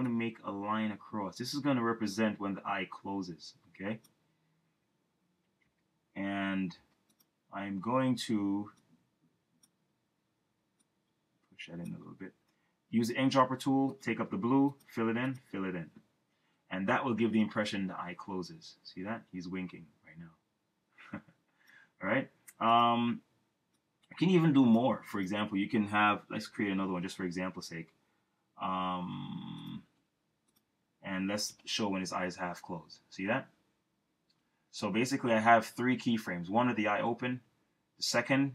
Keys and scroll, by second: 7.7 v, 12.8 i, 26.4 F6, 29.1 v.